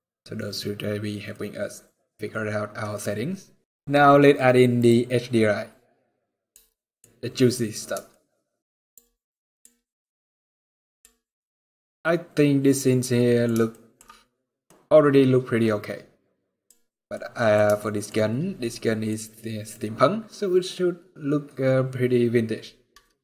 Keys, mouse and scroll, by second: 0.5 scroll up 2, 0.7 scroll down 1, 1.0 middle click.